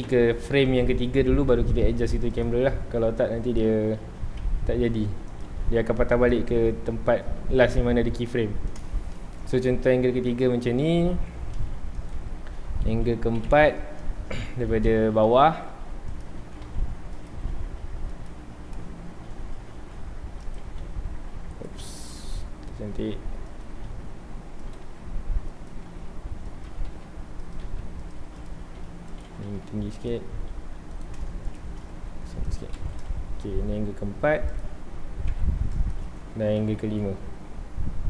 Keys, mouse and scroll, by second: 0.0 Right, 1.7 g, 2.4 click, 2.6 r, 3.6 click, 3.8 g, 6.3 click, 6.8-7.3 scroll up 1, 7.5 g, 8.8 click, 9.1 shift+middle drag, 9.4 g, 10.4 click, 13.3 Right, 14.8-15.4 middle drag, 15.4 g, 16.2 click, 16.4 r, 17.4 g, 18.3 click, 19.0-19.7 scroll down 1, 19.7 r, 21.6 right click, 21.9 r, 25.7 click, 25.8 g, 27.5 click, 27.6 g, 28.4 click, 28.6 Tab, 28.9 2, 29.1 click, 29.4 g, 30.1 click, 30.9 click, 31.4 shift+click, 31.9 g, 32.4 click, 32.5 Tab, 32.8 alt+a, 33.1 ctrl+s, 34.5 click, 35.9 i, 36.9 Right.